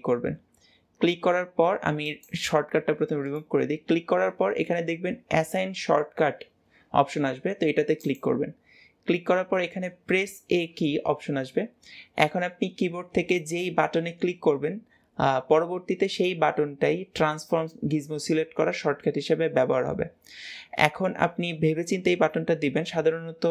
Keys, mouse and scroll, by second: 3.1-23.5 right drag.